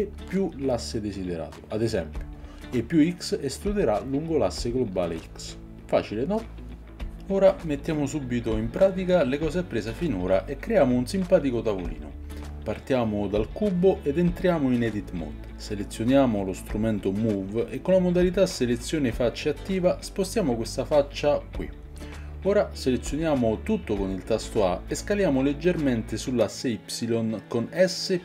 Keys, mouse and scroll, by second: 1.2 click, 2.3 e, 6.6 n, 15.8 Tab, 16.5 click, 18.6-28.2 drag, 27.2 a, 28.1 s.